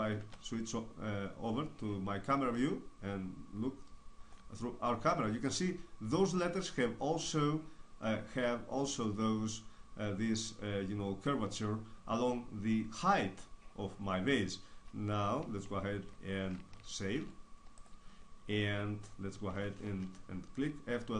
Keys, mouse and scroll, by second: 0.1 KP_0, 17.1 ctrl+s.